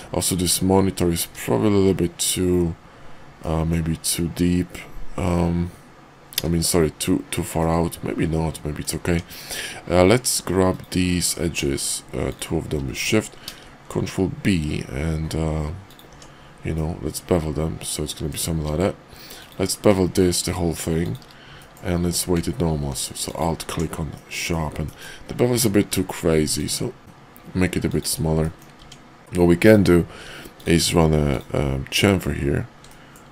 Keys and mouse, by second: 0.3 Tab, 1.1 `, 3.4 middle click, 7.6-8.9 middle drag, 9.1 Tab, 13.4 ctrl+b, 16.1 Tab, 16.8-18.3 middle drag, 18.5 q, 21.6 middle drag, 22.0 q, 24.1-24.5 drag, 24.8 drag, 25.5 q, 28.4 drag, 28.8 Tab, 29.5 click, 30.4 ctrl+click, 32.8 click.